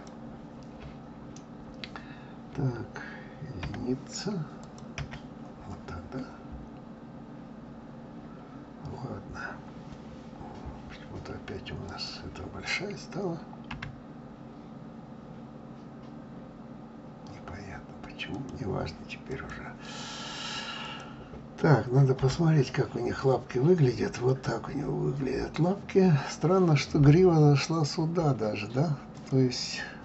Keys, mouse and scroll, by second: 3.5 KP_1, 4.6 click, 4.9 KP_1, 6.5-6.8 scroll down 2, 7.6-8.0 scroll up 4, 10.4 scroll down 2, 11.9 click, 13.7 s, 19.3 click, 20.8 click, 22.2 g, 29.1 click.